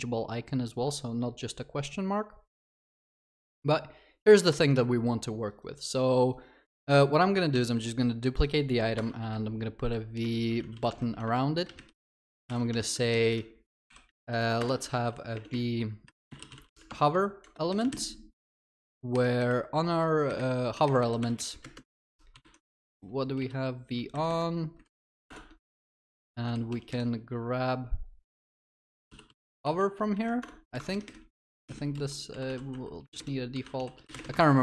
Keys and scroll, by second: 7.6 ctrl+d, 10.9 Tab, 12.5 ctrl+y, 16.9 Tab, 19.1 alt+shift+Down, 19.9 alt+shift+Up, 25.3 Return, 30.4 Return, 34.4 Return, 34.5 ctrl+s.